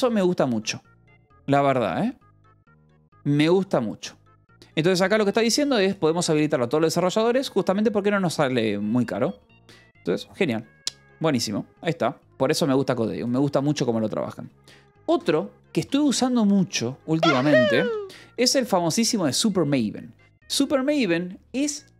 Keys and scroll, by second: 14.9-16.4 typing, 16.6 Return, 17.7 f, 18.5 p, 20.7 j.